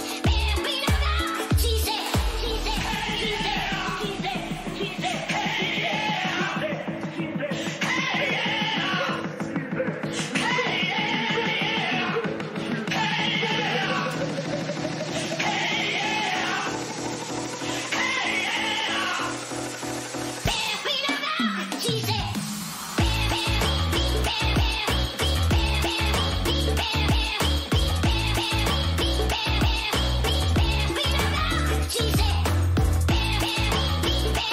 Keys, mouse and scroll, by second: 2.4 Tab, 2.9 middle click, 7.0 middle click, 10.3 Tab, 10.7-16.7 middle drag, 13.0 a, 13.5 a, 16.9-21.0 middle drag, 21.0 Tab.